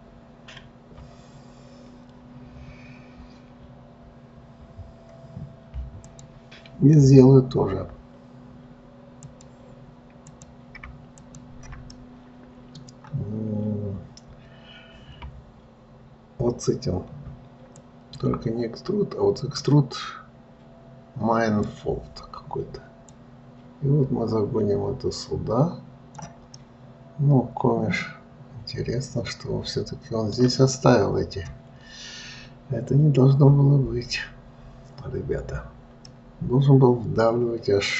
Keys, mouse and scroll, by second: 6.4 click, 9.6 click, 10.6 click, 11.5 shift+click, 12.3-15.3 middle drag, 18.1-21.2 drag, 23.5 click, 26.9-30.0 middle drag, 36.4-37.9 middle drag.